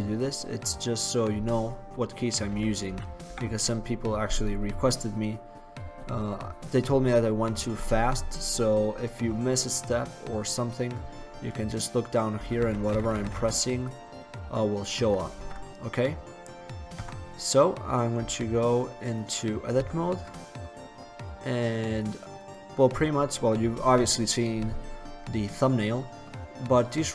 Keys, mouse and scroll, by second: 2.1 middle click, 2.6 t, 3.0 t, 3.3 n, 12.6-13.1 typing, 15.5 ctrl+z, 17.0 Tab, 18.3 Tab, 19.9 Tab, 22.0 click, 22.5-23.9 right drag, 23.5 click, 23.9-27.1 middle drag.